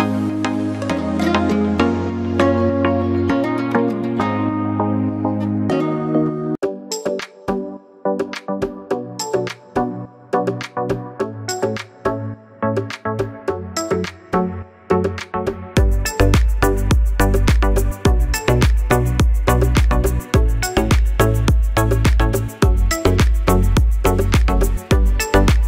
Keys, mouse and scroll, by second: 1.1 scroll down 1, 2.2 click, 3.6 scroll up 1, 4.2 click, 6.9 scroll up 1, 7.5 click, 8.7 scroll up 1, 8.8 scroll down 1, 9.6 click, 12.8 right click, 13.8 click, 14.5 scroll down 1, 15.7 scroll up 1, 15.8 click, 17.5 click, 22.7 right click, 24.3 click.